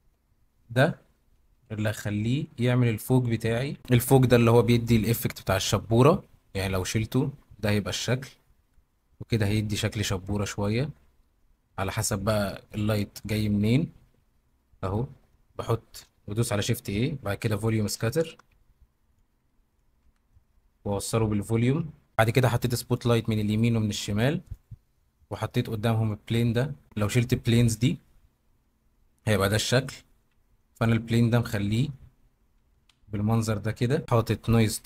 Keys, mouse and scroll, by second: 1.5 g, 2.1 middle click, 3.6 Escape, 5.9 g, 8.6 Escape, 13.5 middle click, 14.5 middle click, 15.4 middle click, 16.5 shift+a, 20.0 x, 22.9 middle click, 23.3 middle drag, 23.5 click, 24.4 drag, 25.1-25.5 middle drag, 28.6 g, 30.2 Escape, 31.4-32.0 middle drag, 32.8 KP_Decimal, 33.7-34.0 middle drag.